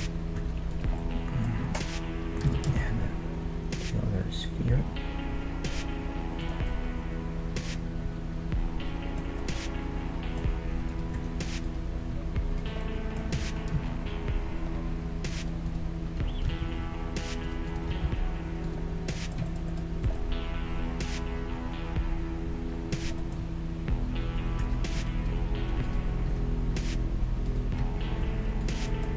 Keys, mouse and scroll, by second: 0.0 Tab, 0.4 Tab, 0.7-2.3 drag, 2.4 shift+d, 6.7-8.5 middle drag, 9.4-10.9 middle drag, 10.9-11.9 right drag, 11.2 Tab, 11.7-14.7 middle drag, 12.0-14.3 right drag, 13.4 g, 15.7-17.6 right drag, 16.5 g, 17.9-19.2 right drag, 17.9 g, 18.9-22.0 middle drag, 20.1 Tab, 23.2-25.3 middle drag, 24.6 Tab, 25.0-27.8 right drag, 26.3 g, 27.8 g, 28.9-29.1 middle drag.